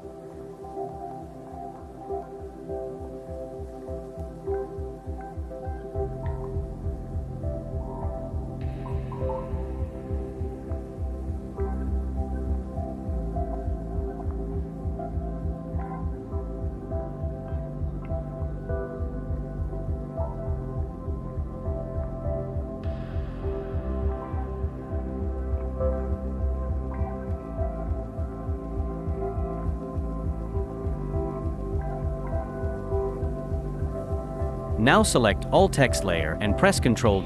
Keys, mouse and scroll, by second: 0.3 shift+click, 0.7 Up, 0.8 Up, 0.9 Up, 1.0 Up, 1.1 Right, 3.4 Down, 4.1 ctrl+t, 4.4 shift+click, 6.8 Right, 7.0 Up, 7.1 Up, 7.3 Up, 7.4 Up, 7.5 Up, 7.7 Down, 7.9 ctrl+t, 8.3 shift+click, 10.8 ctrl+t, 11.3 shift+click, 12.1 Up, 12.2-12.6 Up, 14.9 ctrl+t, 15.2 shift+click, 15.8 shift+click, 17.3-17.7 Up, 20.0 ctrl+t, 20.2 shift+click, 22.4 ctrl+t, 22.7 shift+click, 23.6-24.1 Up, 24.5 shift+click, 26.6 ctrl+t, 26.9 shift+click, 28.8 Down, 30.3 Down, 30.7 Down, 30.8-31.7 Down, 32.4 Down, 32.4 Down, 32.5-33.2 Down, 33.9 Down, 33.9 Down, 34.0 Down, 35.8 shift+click, 37.0 ctrl+g.